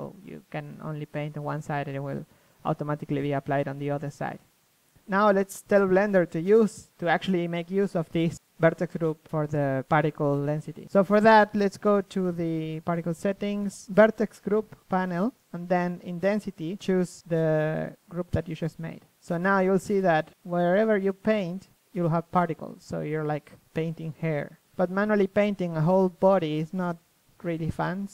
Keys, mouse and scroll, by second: 3.0 KP_3, 6.7 KP_1, 8.1 click, 8.8 click, 10.8 click, 13.6 click, 14.5 KP_3, 15.0 middle click, 15.3 click, 17.0 KP_1, 17.5 KP_3, 17.5 KP_1, 17.8 KP_3, 19.1 ctrl+z, 19.2 KP_1, 20.3 KP_3, 21.0-26.0 drag, 26.0 KP_3, 26.5 Tab, 27.2 a, 27.4 a, 27.7 z.